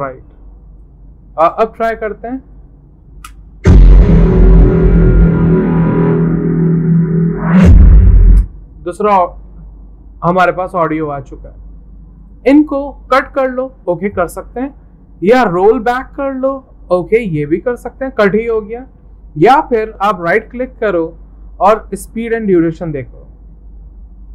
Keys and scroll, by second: 19.3 ctrl+z.